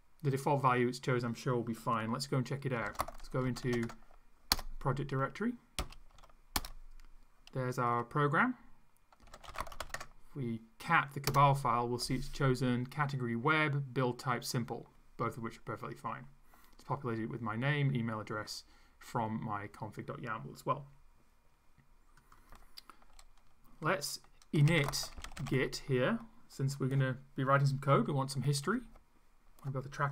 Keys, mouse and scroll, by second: 2.6-4.2 typing, 4.6 Return, 5.8 l, 6.1 s, 6.6 Return, 9.0-10.3 typing, 11.3 Return, 22.2 click, 24.3-26.0 typing.